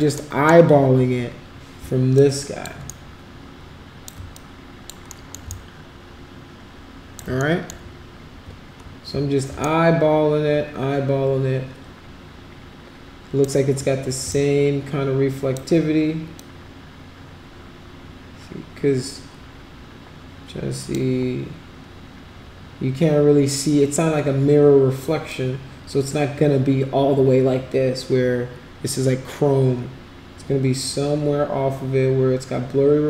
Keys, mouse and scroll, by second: 0.3 alt+middle click, 2.2 alt+click, 2.9-4.1 shift+right drag, 4.4 alt+click, 5.2 alt+middle click, 5.6-7.2 shift+right drag, 7.5 alt+middle click, 9.6-13.5 shift+right drag, 14.3-15.6 shift+right drag, 16.4-21.0 drag, 25.3-33.0 drag.